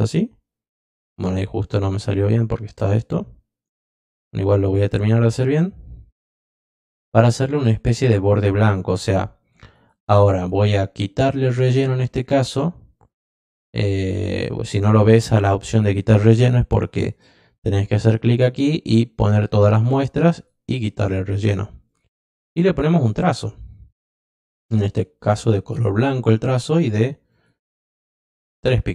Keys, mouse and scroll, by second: 2.2 click, 3.8-6.6 drag, 11.4 click, 17.0 click, 19.1 click, 20.3 click, 21.8 click, 23.1 click, 24.1 click, 25.8 click, 26.8 click, 27.3 click, 27.7 click.